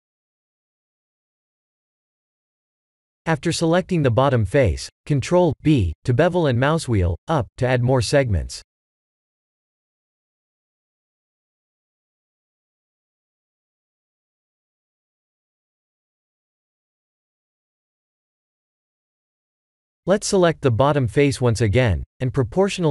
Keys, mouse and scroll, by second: 1.4 middle click, 2.2 3, 2.4 click, 3.2 middle click, 4.5 KP_1, 5.4 ctrl+b, 19.4 middle click, 19.9 middle click, 20.1 3, 20.5 click, 22.4 click.